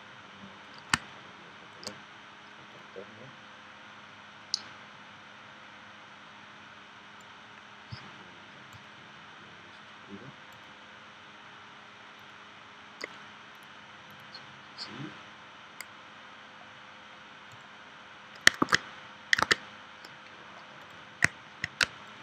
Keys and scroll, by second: 18.6 super+Tab, 19.4 super+Tab, 21.8 space.